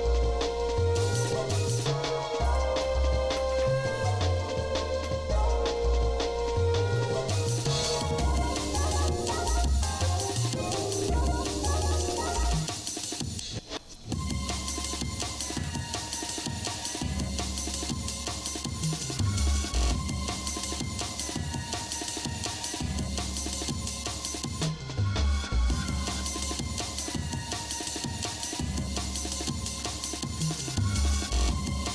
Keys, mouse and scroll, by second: 2.9 shift+middle click, 3.5 Tab, 4.5 shift+middle click, 5.2 scroll down 1, 5.8 shift+middle click, 6.5 shift+middle click, 7.7 middle click, 8.1 shift+middle click, 9.4 shift+middle click, 10.5 middle click, 11.0 Tab, 11.8 shift+middle click, 12.2 ctrl+Tab, 13.0 click, 14.1 shift+middle click, 15.6 ctrl+i, 17.2 shift+middle click, 19.2 ctrl+KP_Subtract, 20.1 shift+middle click, 21.2 g, 23.7-24.9 shift+middle drag, 25.1 shift+middle click, 26.7 ctrl+r, 30.2 ctrl+b.